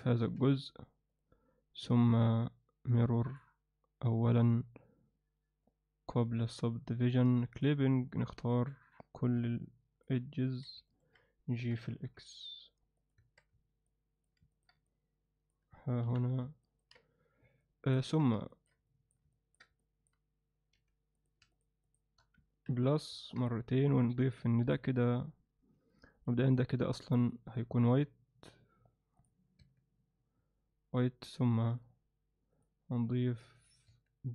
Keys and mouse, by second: 0.2 x, 1.8 Tab, 2.2 Tab, 3.3-4.5 drag, 5.6-6.4 drag, 7.5 click, 8.4 click, 9.4 alt+middle click, 10.4 ctrl+alt+middle click, 10.9 ctrl+alt+middle click, 11.6 g, 13.2 Tab, 13.9-14.2 alt+middle drag, 14.5 ctrl+alt+middle click, 14.9-15.5 alt+middle drag, 16.0 KP_1, 16.6 ctrl+alt+middle click, 17.6-17.9 alt+middle drag, 18.0 Tab, 18.5 ctrl+alt+middle click, 18.9 alt+middle click, 19.3 ctrl+alt+middle click, 19.8 alt+middle click, 20.8 3, 22.7 ctrl+KP_Add, 24.6 click, 26.2 click, 27.3-29.3 drag, 29.6 Tab, 31.8 click, 32.6-33.7 drag, 33.9 Tab.